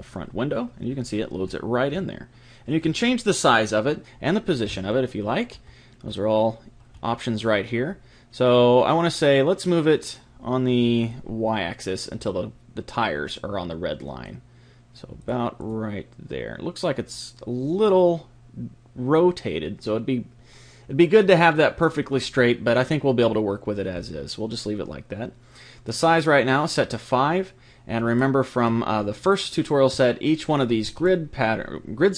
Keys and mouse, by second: 0.0 click, 1.5 middle click, 1.6 click, 1.8-5.0 middle drag, 5.5-10.0 middle drag, 11.1 click, 15.2 click, 28.0-32.1 middle drag.